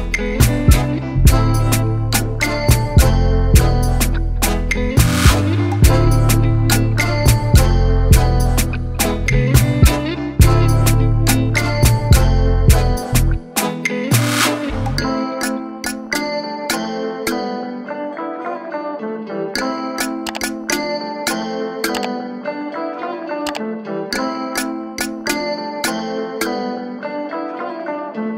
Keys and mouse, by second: 0.3 ctrl+t, 2.0-3.8 drag, 4.6-6.1 drag, 6.4 click, 7.5 click, 9.1 alt+click, 10.1 Return, 12.2 click, 13.7-15.4 alt+drag, 17.1 click, 17.9 click, 18.5-19.8 typing, 20.6 click, 21.7 ctrl+0, 23.0 click, 23.4 click.